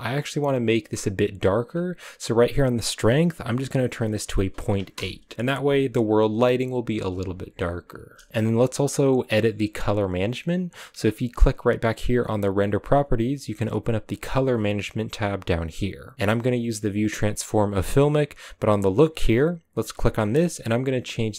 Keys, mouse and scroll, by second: 0.1-4.9 scroll up 1, 4.9 click.